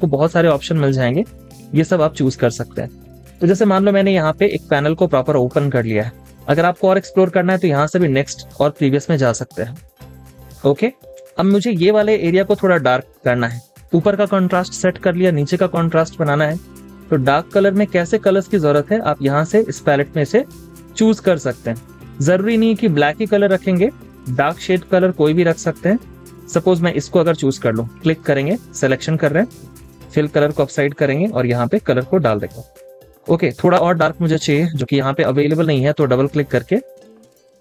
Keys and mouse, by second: 12.4 double click, 28.5-31.5 drag, 32.3-35.3 drag, 36.6 double click.